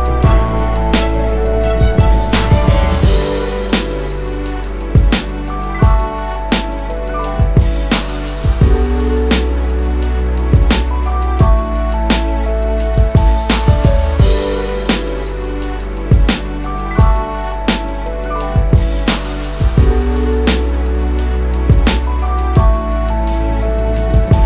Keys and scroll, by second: 4.9-5.7 typing.